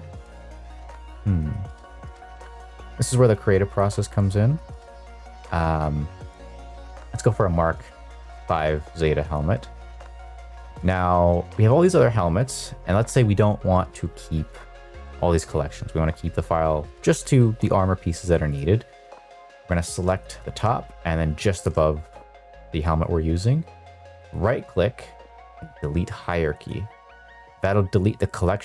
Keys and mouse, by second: 0.2 click, 0.9 click, 1.5 click, 2.1 click, 3.8 click, 4.6 click, 6.5 click, 9.2 shift+click, 10.7 click, 20.1 click, 21.5 shift+drag, 24.2-26.8 right drag.